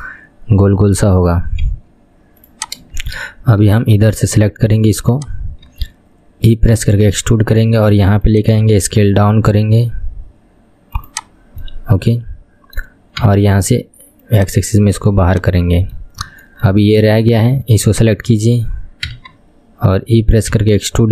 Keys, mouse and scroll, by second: 1.8 KP_1, 2.6 click, 3.3-4.5 shift+middle drag, 4.5-5.2 scroll up 4, 5.2 click, 5.5-5.8 scroll down 2, 5.8 KP_1, 6.9 e, 8.8 s, 11.5 scroll up 2, 11.8-13.4 middle drag, 13.4 KP_3, 13.8 KP_1, 14.4 click, 15.4 click, 15.6 middle click, 16.2-16.6 scroll up 4, 16.6-18.0 middle drag, 18.0 click, 18.4-19.2 scroll down 1, 19.2 KP_3, 20.7 e.